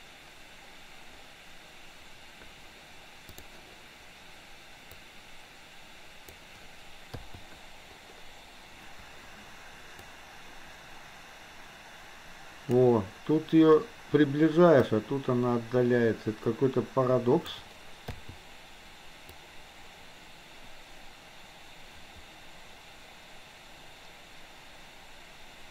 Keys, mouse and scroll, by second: 3.4 click, 4.9 click, 5.3-6.4 drag, 10.0-12.9 drag, 15.0-17.6 drag, 19.4-25.7 drag.